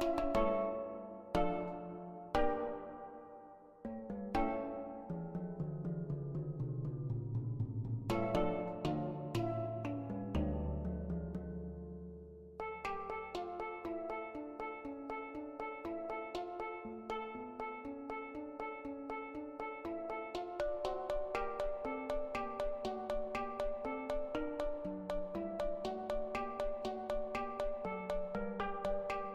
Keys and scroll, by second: 9.8-11.5 typing, 23.9 Delete, 28.9-29.3 typing.